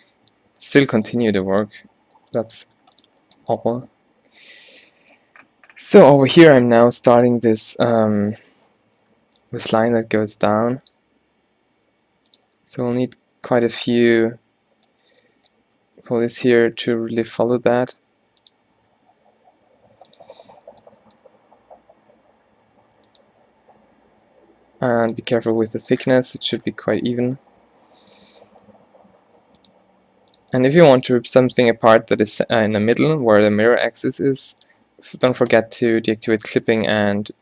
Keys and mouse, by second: 1.0 e, 2.7 g, 6.9 x, 8.4 middle click, 9.0 shift+Tab, 9.4 e, 11.1 e, 12.6 e, 14.0-15.7 middle drag, 15.9 e, 18.8 e, 20.7 middle click, 21.2 middle click, 21.5 e, 23.3 e, 25.4 middle click, 28.8 g, 29.8 e, 31.1 f, 31.7 g, 33.5 g, 36.5 g.